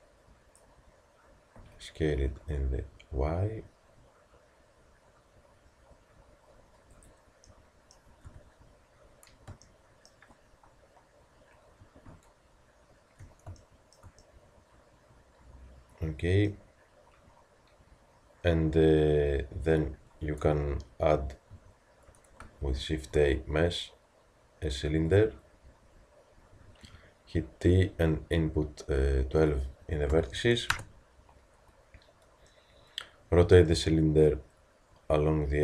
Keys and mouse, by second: 1.6 s, 8.2 KP_3, 16.0 middle click, 21.6 a, 22.8 shift+a, 26.9 t, 27.7 middle click, 28.4-33.0 middle drag, 35.1 r.